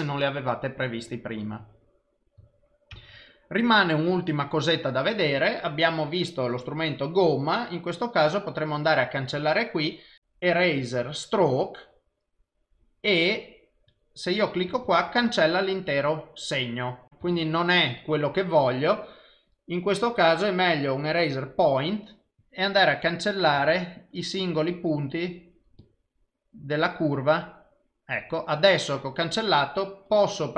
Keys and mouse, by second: 3.0 ctrl+s, 6.9 click, 10.2 click, 13.9 click, 14.9 ctrl+z, 17.1 click, 17.4 ctrl+z, 19.5 click, 22.4 click, 23.7 ctrl+z, 24.2 click, 24.8 click, 25.8 click, 26.3 click, 27.5 click, 30.1 click.